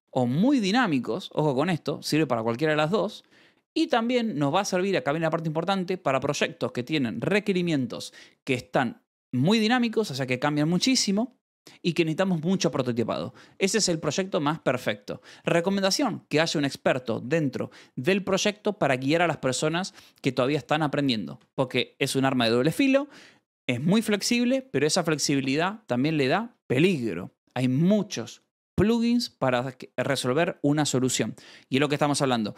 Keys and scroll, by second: 13.1 shift+v, 13.3 Escape, 14.3 shift+v, 14.5 Escape, 21.3 shift+v, 21.6 Escape, 22.0 shift+v.